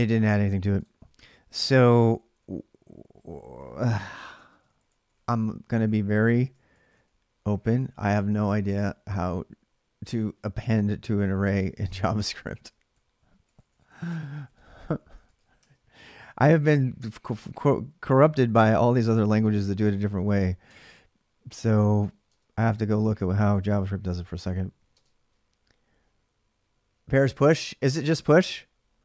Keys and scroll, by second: 1.6 ctrl+[, 1.7-8.9 typing, 3.4 ctrl+a, 11.3 typing, 12.7-15.8 typing, 18.0-21.8 typing.